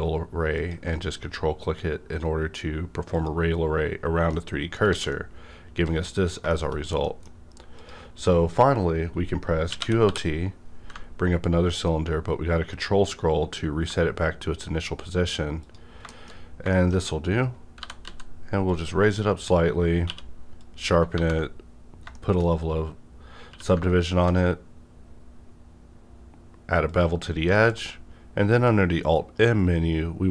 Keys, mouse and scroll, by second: 0.5 ctrl+click, 1.2 scroll down 1, 2.3-3.1 scroll down 1, 3.1 click, 4.3 middle click, 4.4 scroll down 1, 4.9 alt+a, 5.1-6.5 alt+middle drag, 6.5 shift+middle click, 6.7 scroll down 1, 7.0 middle click, 7.7 click, 9.7 typing, 11.4 ctrl+scroll down 1, 15.6 click, 16.1 shift+middle click, 16.3 scroll up 1, 16.7 shift+middle click, 17.4 scroll up 1, 17.8 g, 18.0 z, 18.6 click, 18.7 z, 19.0-19.6 scroll down 1, 20.0 q, 20.6 click, 21.2 ctrl+1, 22.1 shift+middle click, 22.5 scroll up 1, 23.5 q, 24.1 ctrl+click, 25.0 scroll up 1, 26.9 click, 27.6 alt+m.